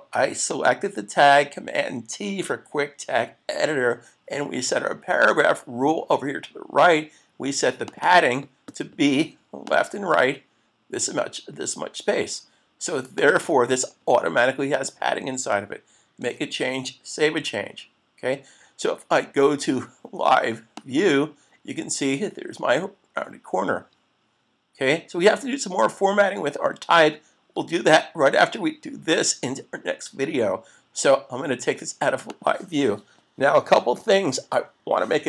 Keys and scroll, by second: 16.2 super+s.